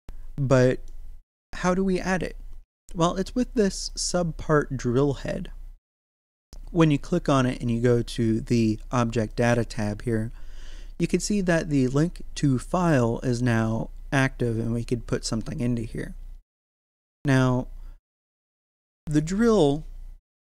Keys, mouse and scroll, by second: 3.8 click, 9.2 click, 14.6 click, 18.4 middle click, 19.1 right click, 20.3-20.4 middle drag.